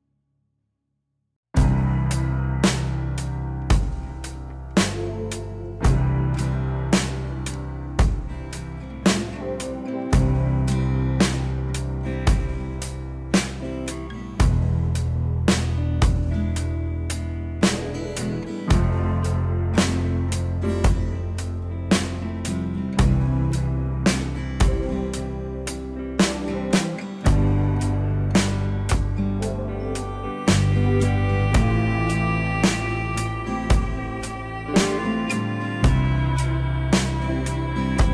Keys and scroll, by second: 7.3 ctrl+z.